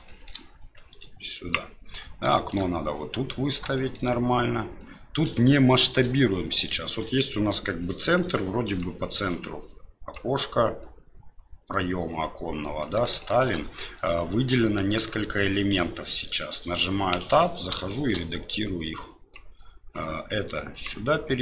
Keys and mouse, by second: 0.0 shift+middle drag, 0.7 click, 2.5 shift+middle drag, 3.8 shift+middle click, 4.8-8.8 drag, 9.5 click, 10.9-12.8 drag, 13.3 shift+middle click, 17.1 Tab, 17.9 middle click, 18.9 click.